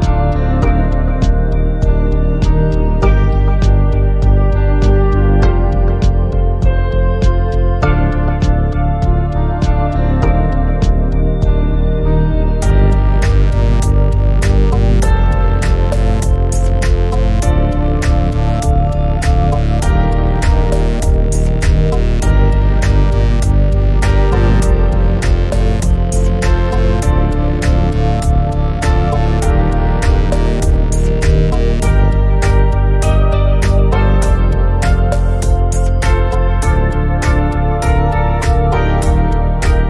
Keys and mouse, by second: 0.7 click, 1.0 shift+a, 2.1 click, 2.5 middle click, 2.9 middle click, 3.3 middle click, 3.8 middle click, 4.4 shift+middle click, 4.5 a, 4.6 middle click, 5.0 click, 6.1 click, 6.2 middle click, 6.8 shift+a, 7.5 click, 7.7 r, 16.7 shift+a, 18.7 click, 19.4 click, 19.9 KP_0, 20.9 click, 21.3 shift+middle click, 22.1 click, 22.6 click, 22.8 middle click, 23.0 click, 23.5 s, 24.1 middle click, 24.3 click, 24.5 s, 24.9 middle click, 25.2 click, 25.3 click, 25.5 click, 26.0 s, 26.7 click, 26.8 s, 28.1 s, 28.4 click, 28.6 click, 29.6 click, 30.0 shift+middle click, 30.4 middle click, 30.8 shift+click, 31.0 click, 31.6 middle click, 32.0 shift+middle click, 32.9 middle click, 33.4 click, 33.7-34.9 drag, 35.3-39.4 drag, 39.6 click.